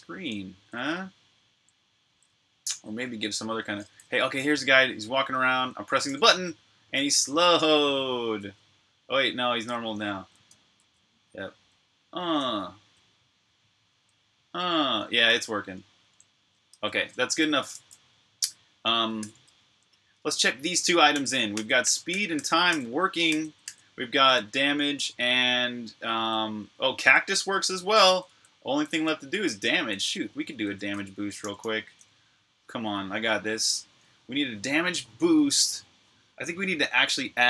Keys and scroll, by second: 5.0-9.1 typing, 11.1-13.8 typing, 15.2-15.9 typing, 16.7 super+q, 19.0 typing, 20.7-31.2 typing, 32.4 typing.